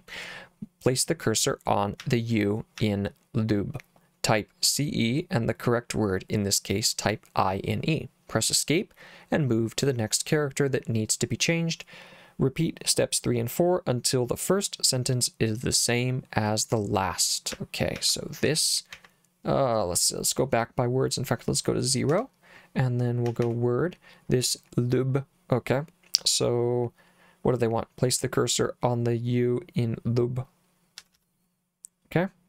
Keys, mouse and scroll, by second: 2.0 j, 2.8 j, 17.5 j, 18.0 j, 18.5 j, 18.9 k, 22.1 0, 23.3 w, 23.4 w, 31.0 l, 31.2 l.